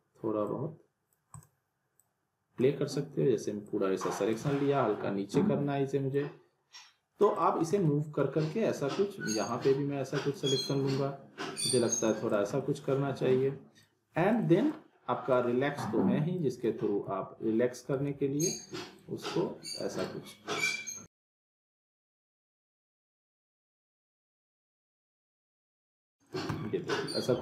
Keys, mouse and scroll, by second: 4.5-6.1 alt+middle drag, 6.1-7.7 click, 7.8-8.8 alt+middle click, 9.5-10.4 drag, 12.6-13.5 alt+middle click, 13.8-14.7 click, 16.7 z, 18.1 ctrl+z, 18.9-19.9 drag, 21.9-22.6 alt+middle click, 23.0-24.6 drag, 26.5 scroll down 1, 26.7-27.3 alt+middle click.